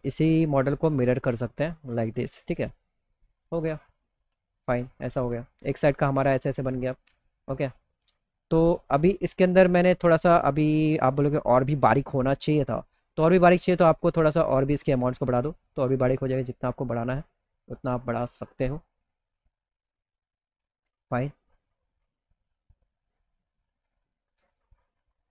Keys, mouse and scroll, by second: 0.3 click, 1.6 click, 2.3 click, 2.9 click, 3.2 middle click, 3.5 alt+middle click, 4.4 middle click, 4.8 alt+middle click, 5.6-6.1 scroll down 1, 6.1 middle click, 12.9 click, 14.3 click, 14.8 click, 15.5 click, 16.2 click, 16.9 click, 17.6 click, 18.8 middle click, 19.4 middle click, 19.9 middle click, 20.2 alt+middle click, 20.8 middle click, 21.3-22.6 alt+middle drag, 23.1 middle click, 23.4 alt+middle click, 24.0 middle click, 24.3 middle click, 24.7 middle click.